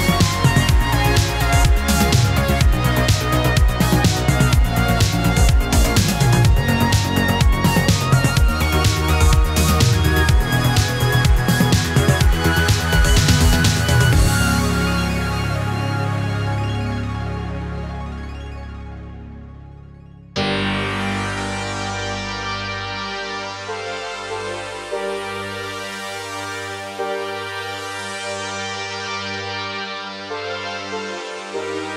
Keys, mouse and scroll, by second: 0.1 click, 1.3-3.5 drag, 3.5-5.0 drag, 5.0-6.0 drag, 6.5-8.5 drag, 8.5-10.0 drag, 10.0-13.1 drag, 20.4 space, 23.1-27.4 drag, 31.2 ctrl+d.